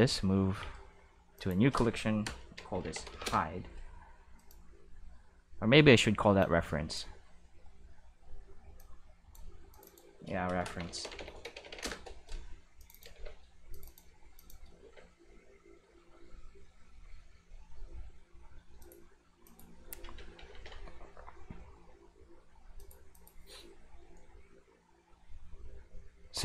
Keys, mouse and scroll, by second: 0.0 m, 1.3 click, 2.7 shift+h, 2.8 shift+i, 2.9 shift+d, 3.0 shift+e, 3.2 Return, 4.3 click, 6.3 click, 8.7 click, 9.7 click, 9.9 click, 10.6-11.4 typing, 11.8 Return, 12.7 click, 13.1 shift+e, 13.7 click, 14.3 click, 14.8 shift+e, 18.7 click, 19.4 click, 20.1 ctrl+s, 20.3 ctrl+s, 20.5 ctrl+s, 22.7 click, 23.1 click.